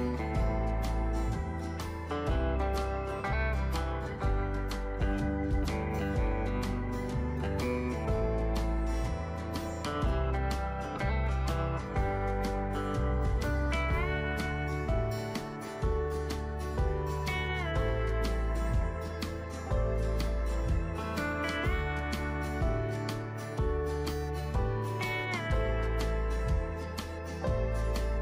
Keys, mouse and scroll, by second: 27.9 right click.